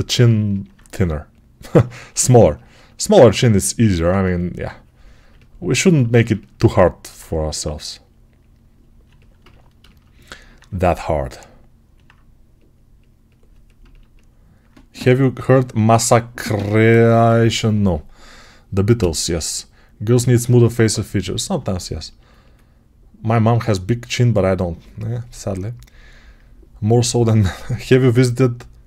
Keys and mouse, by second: 22.2-25.4 alt+drag, 25.4-28.8 right drag.